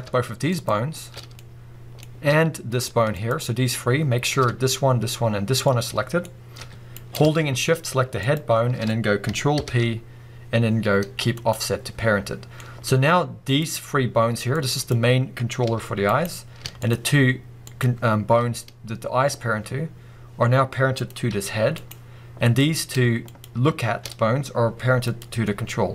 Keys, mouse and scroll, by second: 0.5 shift+click, 1.3 scroll up 1, 1.4-3.2 middle drag, 3.2 shift+click, 5.7-7.1 middle drag, 6.6 g, 7.1 right click, 8.2 shift+click, 9.6 ctrl+p, 12.4 scroll down 2, 12.6 middle click, 13.5 click, 14.5 click, 15.7 g, 16.2 right click, 16.8 shift+click, 17.7 shift+click, 21.0 click, 21.3 g, 21.9 right click, 22.5 click, 23.3 shift+click, 25.1 click, 25.5-25.9 middle drag.